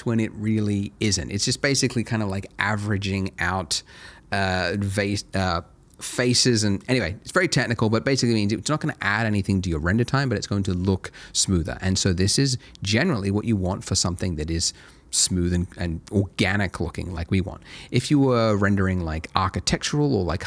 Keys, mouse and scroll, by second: 13.3-14.8 scroll down 1.